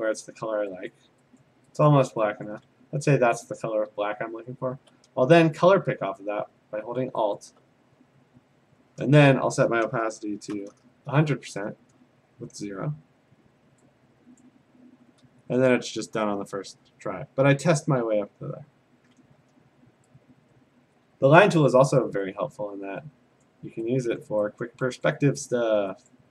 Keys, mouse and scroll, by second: 0.3 click, 1.0 click, 1.4 click, 1.9 click, 2.5 click, 7.5-8.6 alt+click, 10.5 ), 14.4 click, 21.4 click, 22.5 click, 23.4 click, 24.2 click, 24.6 click, 25.5 click, 26.1 click.